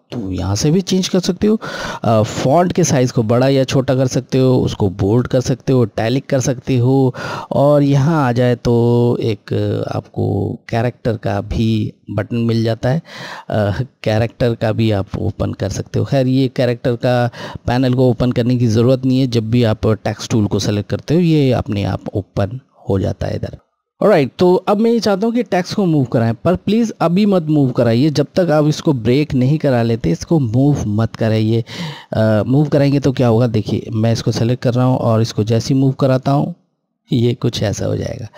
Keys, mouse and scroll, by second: 7.8 click, 33.9 click.